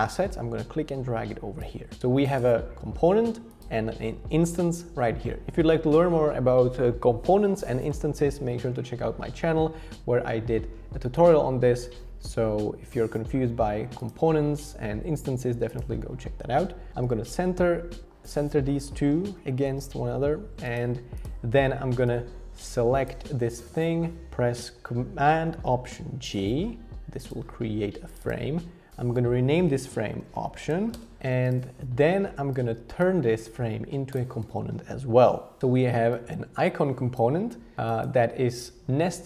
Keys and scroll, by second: 16.9 alt+h, 17.0 alt+v, 19.6 alt+h, 19.8 alt+v, 26.2 alt+super+g, 30.0-31.2 typing.